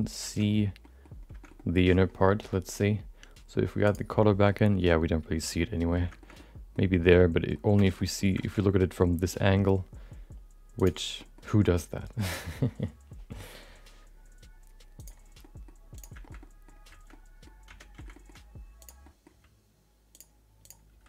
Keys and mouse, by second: 0.5 Tab, 0.8 middle click, 1.4 middle click, 1.5 middle click, 3.8 click, 4.5-5.9 middle drag, 6.2 shift+middle click, 6.3 middle click, 7.1 middle click, 7.8 shift+middle click, 7.9 middle click, 8.4 shift+middle click, 9.3 middle click, 10.7 click, 11.2 middle click, 12.2 click, 14.9 click, 15.4 middle click, 15.9 click, 16.4 middle click, 17.1 middle click, 17.6 Tab, 17.9 shift+middle click, 18.1 middle click, 18.8 click, 19.0 middle click, 19.4 g, 20.6 click, 20.9 g.